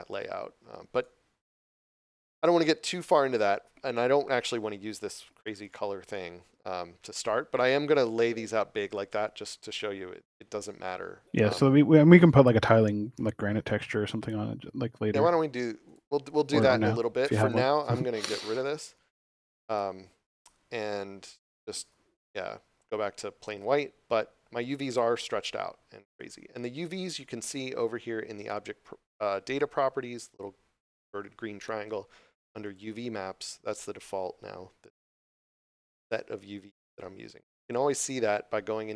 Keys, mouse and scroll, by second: 0.9 right click, 2.4 scroll down 1, 9.0 scroll up 1, 11.8 scroll up 1, 13.2 Tab, 15.8 click, 18.8 c, 19.6 right click, 22.0 x, 29.5 click, 32.6 click, 37.9 click.